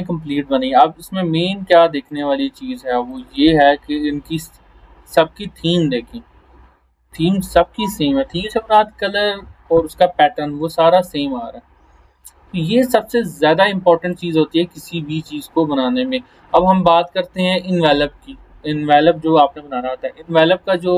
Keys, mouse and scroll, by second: 0.1 scroll up 1, 2.1 click, 5.9 scroll up 1, 10.1 scroll down 1, 13.0 scroll up 1, 14.1 click, 15.6 scroll up 1, 16.9 click.